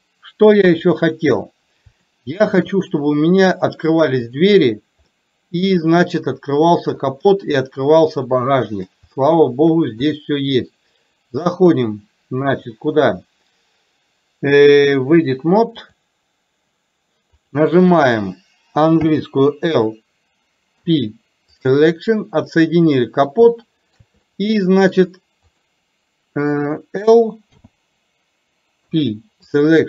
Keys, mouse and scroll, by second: 0.6 KP_3, 2.1 shift+middle click, 5.2 middle click, 7.0 click, 8.4-8.9 middle drag, 9.1-9.7 shift+middle drag, 10.1 click, 11.6-16.2 drag, 17.4 click, 22.6 middle click, 23.6 shift+middle click, 24.2 middle click, 25.6 click.